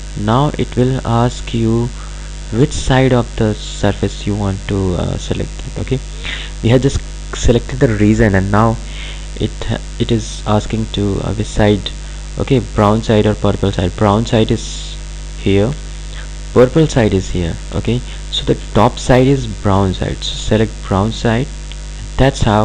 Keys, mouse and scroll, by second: 15.5 ctrl+Num_Lock, 16.2-16.8 ctrl+alt+drag, 18.2 ctrl+alt+click, 22.2-22.6 drag.